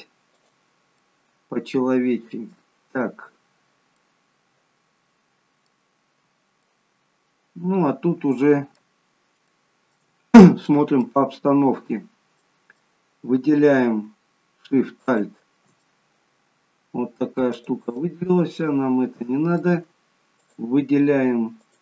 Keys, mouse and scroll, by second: 0.9 middle click, 3.0-3.5 scroll down 2, 3.5-3.9 scroll down 2, 3.9 middle click, 5.8-6.6 scroll down 1, 6.6 middle click, 9.4 shift+middle click, 10.0-10.5 scroll up 3, 10.5 middle click, 12.2 middle click, 14.8 alt+shift+click, 15.7 middle click, 17.6 click, 18.0 middle click, 20.3 shift+click.